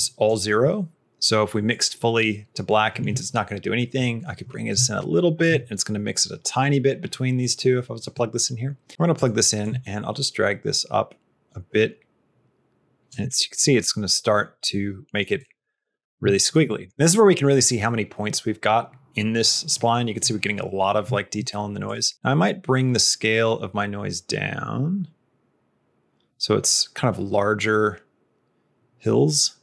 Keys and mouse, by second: 1.6 click, 4.6 shift+click, 7.5 click, 9.7-13.0 shift+drag, 13.6 middle click, 14.6 middle click, 15.3 middle click, 15.6 middle click, 16.2 shift+middle click, 16.6 middle click, 17.6 middle click, 19.6 middle click, 21.8-29.6 drag.